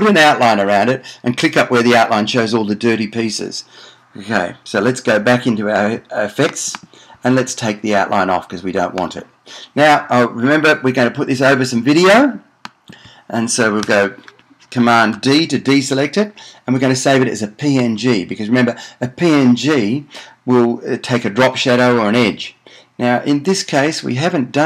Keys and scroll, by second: 15.5 super+d.